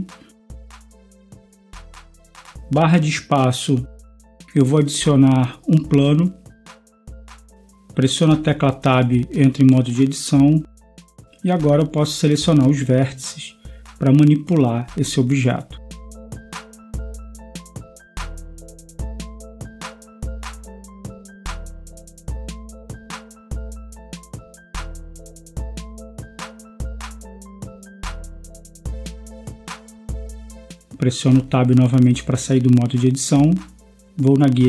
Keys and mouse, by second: 1.3 a, 3.6 space, 9.6 Tab, 12.1 a, 12.4 b, 14.8 g, 23.9 b, 26.9-28.9 drag, 30.8 Tab.